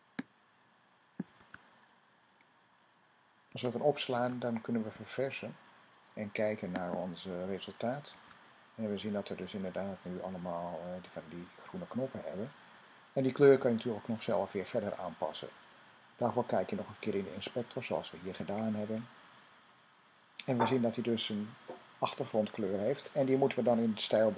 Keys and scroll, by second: 1.2 super+v, 3.2 super+s, 7.9 super+r.